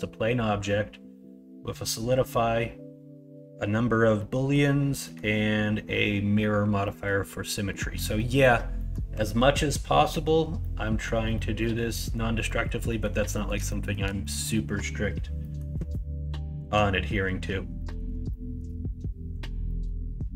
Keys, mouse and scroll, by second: 4.2-4.5 middle drag, 5.0 middle click, 6.8 middle click, 7.5 middle click, 8.1 middle drag, 8.7 middle click, 10.6-11.0 middle drag, 11.3 middle drag, 11.9 middle drag, 12.4 middle drag, 12.8 middle drag, 13.3 middle click, 13.7 shift+middle drag, 14.2 middle drag, 15.4 middle click, 17.7 middle drag, 18.3-18.6 shift+middle drag, 19.6 middle drag.